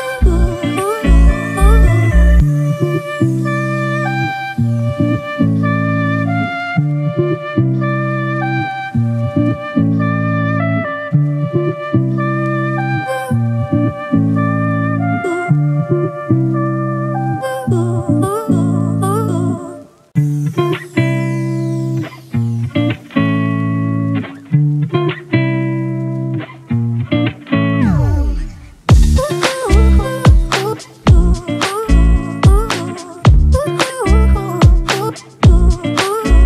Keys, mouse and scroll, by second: 2.2 double click, 11.5 ctrl+t, 16.2 alt+shift+click, 20.1 Down, 20.4 Down, 21.3 Up, 21.5 Right, 23.1-23.9 scroll down 1.